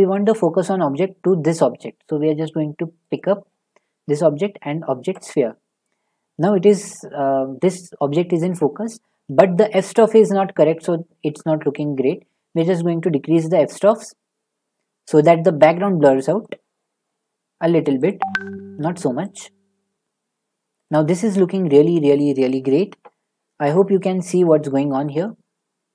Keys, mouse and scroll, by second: 5.2 click, 16.8 middle click, 18.1 click, 18.9 click, 20.8 click.